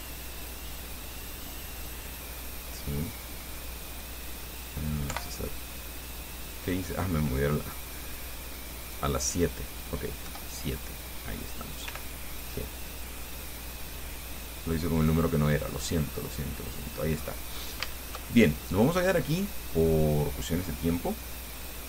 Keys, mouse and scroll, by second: 0.6 click, 1.4-3.8 drag, 5.4 7, 7.9 click, 9.0 click, 10.5 KP_7, 12.1 g, 14.9 click, 16.0 click, 17.1 scroll down 1, 17.4-18.0 scroll up 2, 18.1 shift+click, 19.1 shift+scroll down 1, 19.4-21.8 drag.